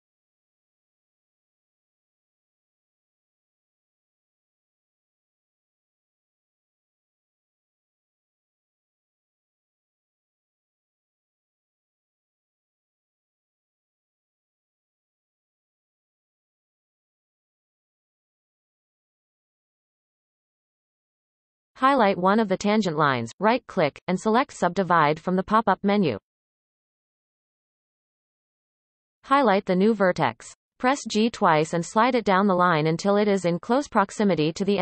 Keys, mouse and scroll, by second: 1.4 ctrl+KP_Add, 2.0-2.3 scroll up 2, 2.4-2.7 shift+middle drag, 2.7-4.4 scroll up 4, 4.9 scroll up 3, 5.4-6.6 shift+middle drag, 6.6 ctrl+KP_Add, 7.0 ctrl+KP_Add, 8.2 ctrl+KP_Add, 8.7-9.6 scroll up 3, 9.6-10.0 shift+middle drag, 10.0-11.9 scroll up 1, 11.9 ctrl+KP_Add, 12.4 x, 14.0-17.9 scroll down 14, 17.9-19.5 scroll down 2, 19.5-20.4 scroll down 3, 21.1 click, 22.3-24.4 right drag, 24.4-25.6 drag, 25.6-28.0 scroll down 1, 28.0 click, 29.2 shift+middle click, 29.8 scroll up 2, 30.9 g, 33.5 shift+middle click, 33.9-34.4 scroll up 6, 34.5 shift+middle click.